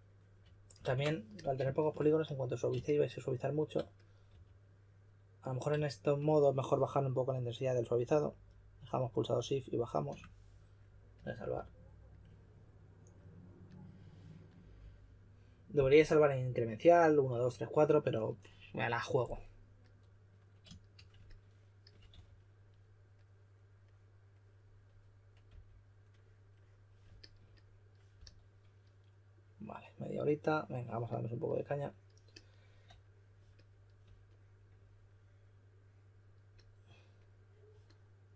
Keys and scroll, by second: 0.7 super+z, 4.2 4, 22.0 4, 25.2-25.9 typing, 28.1 s.